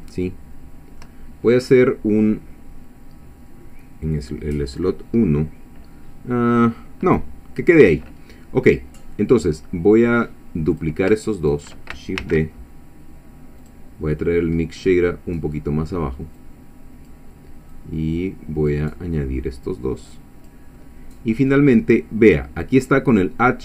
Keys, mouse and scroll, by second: 0.1-1.2 shift+middle drag, 8.9 middle click, 9.7-10.1 scroll down 1, 10.7 click, 11.4 shift+click, 12.2 shift+d, 13.6 click, 14.3-14.8 scroll down 2, 14.9 middle click, 15.6 middle click, 16.4 click, 17.7-18.9 drag, 19.5-20.7 drag, 20.7 middle click.